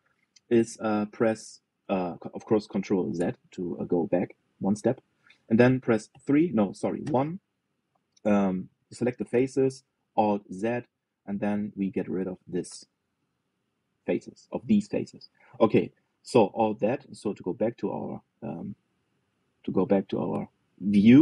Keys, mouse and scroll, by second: 3.9 ctrl+z, 4.8 click, 5.9 middle click, 6.8 KP_3, 7.7 KP_1, 9.6-11.2 drag, 11.2 alt+z, 11.9 click, 13.8 Delete, 15.8-17.4 middle drag, 17.4 alt+z, 17.8-18.2 scroll down 1, 18.2-20.7 middle drag, 20.8-21.2 scroll up 2.